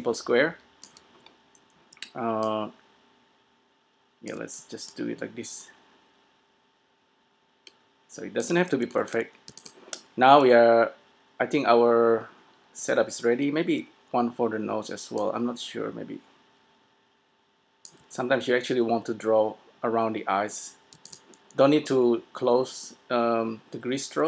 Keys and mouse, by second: 2.0 d, 2.5-4.5 drag, 4.8 d, 5.0 click, 8.6 d, 9.6 s, 13.1 a, 13.9-15.3 d, 17.9 d, 21.1 s.